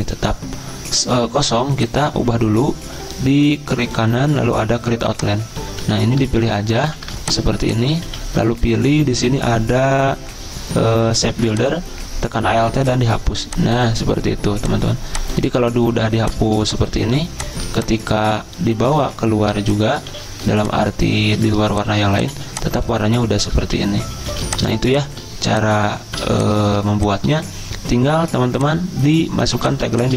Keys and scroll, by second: 2.0-2.7 typing, 5.8 c, 6.8 v, 8.0 ctrl+z, 15.9-17.5 typing, 18.7 ctrl+g, 20.1 ctrl+z, 21.6 space, 22.4 z, 23.6 ctrl+z, 24.3 z, 26.0 v, 26.8 v, 28.3 z, 29.8 v.